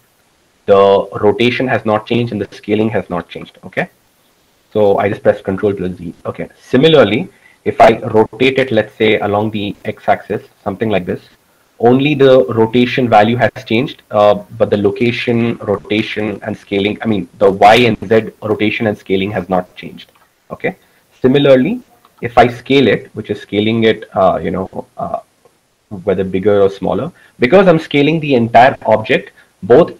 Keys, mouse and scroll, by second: 4.5 ctrl+z, 8.5-9.9 drag, 9.2 r, 20.5 ctrl+z, 22.5 s.